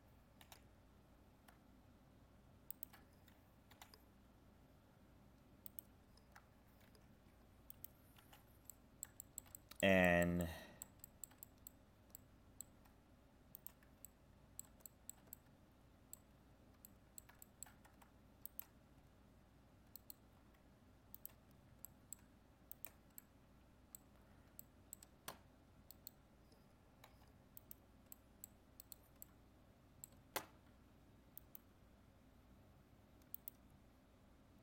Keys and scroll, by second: 6.8 ctrl+f.